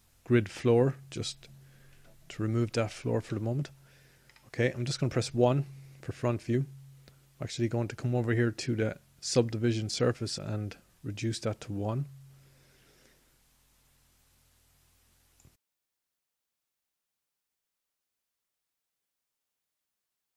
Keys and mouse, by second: 7.8 n, 10.7 KP_1.